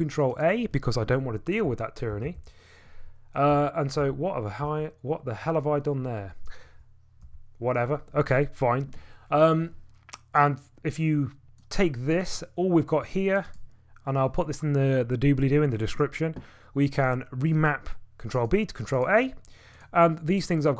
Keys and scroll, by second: 1.6-2.1 typing, 3.3-4.6 typing, 7.2 u.